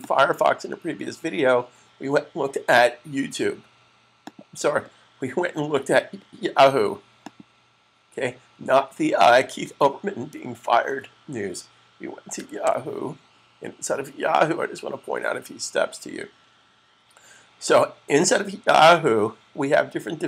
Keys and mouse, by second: 4.0 click, 7.1 click, 16.8 typing.